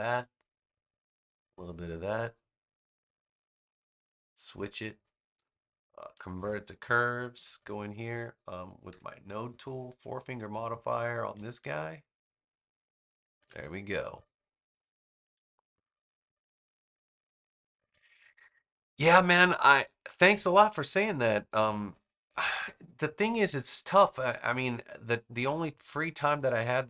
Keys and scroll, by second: 6.2 super+Return, 7.2 a.